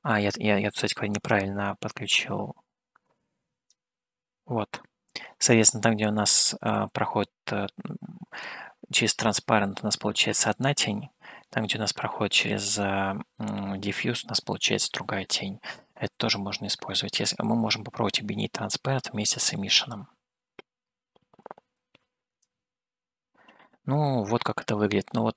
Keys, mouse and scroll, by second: 1.6-3.9 drag, 9.9-11.7 middle drag, 12.6 middle click, 16.9-17.4 scroll up 1, 17.4-19.0 middle drag, 20.1-22.8 drag, 24.5-25.3 middle drag.